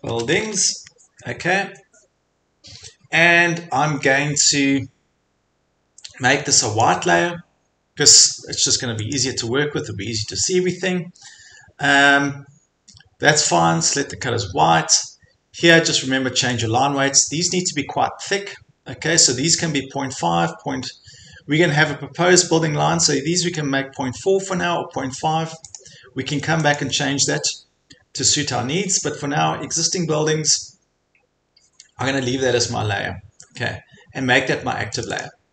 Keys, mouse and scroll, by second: 0.0-1.0 typing, 6.8-14.2 drag, 11.8 scroll, 16.7 click, 19.4-20.1 scroll down 3, 20.4-20.8 scroll up 1, 22.7-23.6 scroll, 23.6 click, 25.8 click, 26.8 click, 35.1 click, 35.2 click.